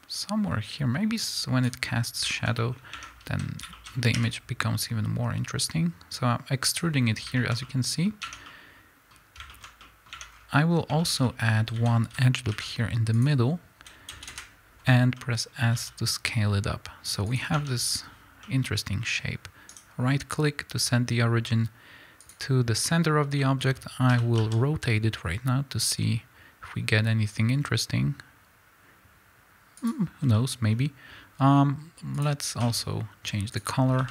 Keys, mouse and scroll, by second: 3.0 Tab, 3.1 scroll up 1, 3.3 a, 4.2 e, 6.8 click, 8.2 Tab, 10.3 scroll up 1, 11.6 a, 13.1 ctrl+r, 15.7-17.4 middle drag, 15.7 s, 17.4 click, 17.6 Tab, 22.3-24.2 right drag, 24.2-29.9 middle drag, 24.2 r, 29.9 click, 32.3-34.1 drag.